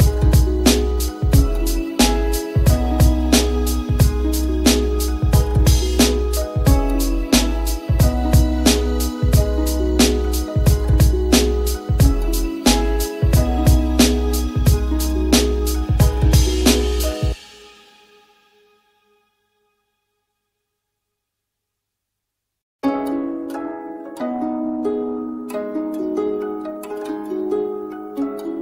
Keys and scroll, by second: 17.2 j, 20.1 l, 22.8 t.